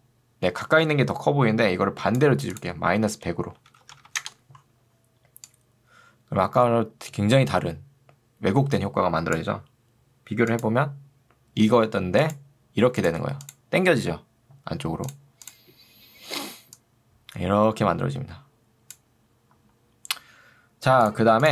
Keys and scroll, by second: 4.0 0, 4.2 Return.